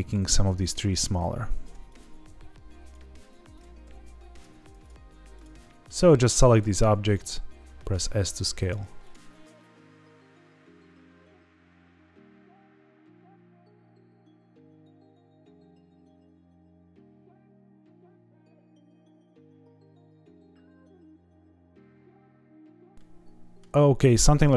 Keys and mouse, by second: 0.1 s, 0.5 click, 1.0 click, 1.2 s, 1.6 click, 1.9 click, 2.8 click, 2.8 s, 3.5 click, 3.8 s, 4.3 click, 4.8 click, 5.6 middle drag, 6.0 s, 6.5 click, 7.0 click, 7.3 s, 7.8 click, 8.3 click, 8.6-11.1 typing, 9.0 click, 9.7 click, 10.1 click, 10.2 click, 10.4 click, 10.6 click, 10.8 drag, 11.7 click, 12.1 click, 12.4-14.6 typing, 12.5 drag, 13.0 click, 13.3 click, 13.6 drag, 14.0 click, 14.4 click, 14.6 click, 14.9 click, 15.1 click, 15.3 click, 16.0 click, 16.0-18.0 typing, 16.1 middle click, 16.6 click, 16.9 click, 17.0 click, 17.4 click, 17.8 click, 18.0 click, 18.5 click, 18.9 click, 19.0 click, 19.4 click, 19.4 s, 19.5 middle click, 19.8 click, 20.1 click, 20.2 click, 20.4 drag, 20.4-22.2 typing, 20.8 click, 21.0 click, 22.0 click, 22.3 click, 22.4-22.8 middle drag, 22.9 middle click, 23.8-24.2 shift+middle drag.